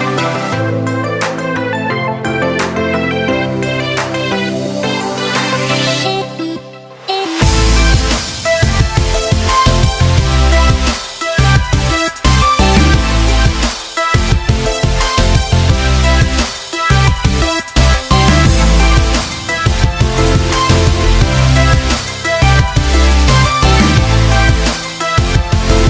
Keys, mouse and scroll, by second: 6.8-12.5 drag, 16.1 click, 18.8 click, 18.8-25.8 drag.